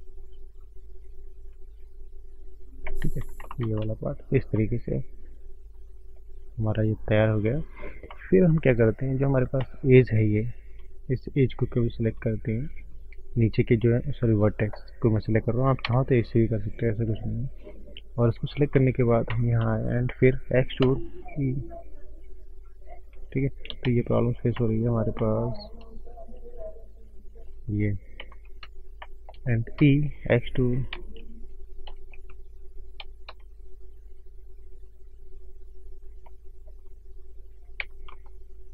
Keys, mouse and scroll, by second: 1.9 click, 2.9 click, 3.4 ctrl+space, 3.6 ctrl+space, 3.9 click, 4.2 scroll down 5, 5.0 middle click, 6.2 middle click, 6.2-6.6 scroll up 1, 7.4 middle click, 7.4-8.0 scroll up 3, 8.0 middle click, 8.4 shift+middle click, 8.4 shift+scroll up 1, 8.8 middle click, 9.6 alt+click, 11.8 ctrl+shift+right click, 14.8 scroll up 1, 15.8 2, 17.4-17.8 scroll down 2, 18.8 ctrl+space, 19.3 ctrl+space, 19.8 shift+middle click, 20.8 e, 24.0 ctrl+z, 24.5 ctrl+space, 25.1 middle click, 25.7-26.3 scroll up 6, 26.8 shift+click, 28.3 ctrl+space, 28.9 shift+middle click, 30.1 click, 30.1 3, 30.9 ctrl+z, 32.0 ctrl+z, 33.3 e, 34.5 click, 36.2 shift+middle click, 36.2 shift+scroll up 1.